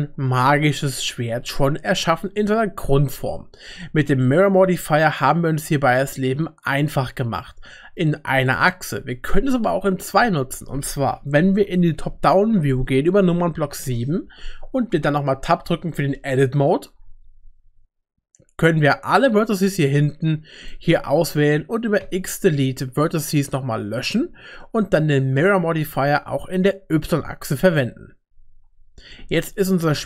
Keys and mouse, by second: 4.2-8.0 middle drag, 8.3 click, 13.4 KP_7, 15.6 Tab, 16.4 shift+middle click, 18.8-20.7 drag, 22.0 x, 24.1 typing, 26.9 click, 28.3 Tab, 29.1 middle click.